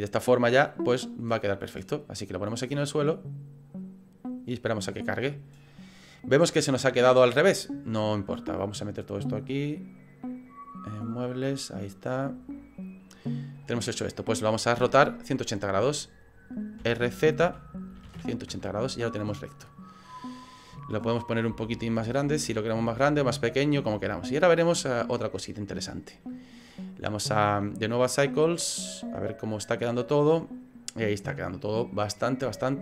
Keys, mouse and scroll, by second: 8.6 click, 12.8 click, 23.9 click, 27.7 click, 28.8 right click.